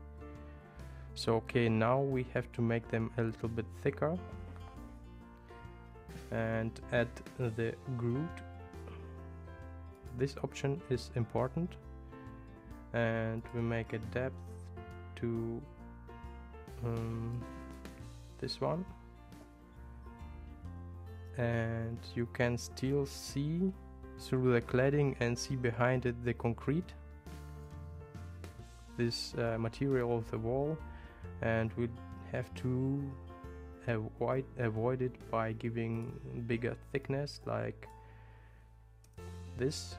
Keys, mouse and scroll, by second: 10.1 click, 13.5-20.6 drag, 36.0-39.9 drag.